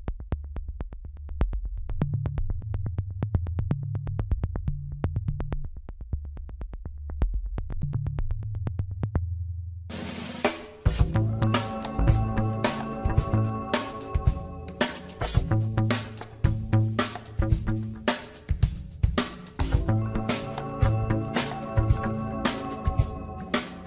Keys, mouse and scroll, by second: 1.2 click, 3.2-4.3 drag, 4.3-4.9 scroll up 1, 4.9-6.4 scroll down 2, 6.4 Tab, 7.0-8.1 scroll up 4, 8.3-9.5 shift+middle drag, 9.5 Tab, 10.0 scroll down 1, 11.2 scroll down 4, 12.0-13.4 scroll down 1, 13.4 click, 15.5-16.5 drag, 17.5 click, 18.4-19.3 scroll up 5, 19.9 Tab, 21.0 shift+middle click, 21.9-22.3 scroll up 3, 22.7 shift+middle click, 23.4 click.